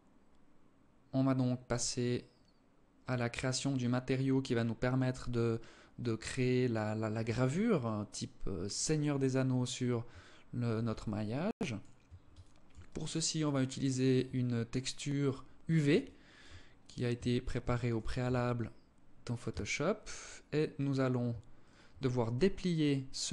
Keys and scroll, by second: 6.8 Escape, 16.3 Tab, 16.8 Tab, 17.5 Tab, 18.7 a.